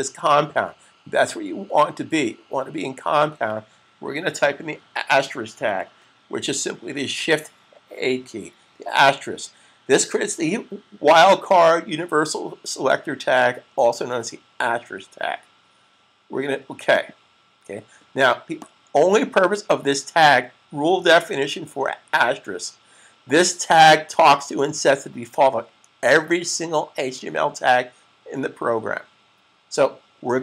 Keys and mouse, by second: 16.8 click.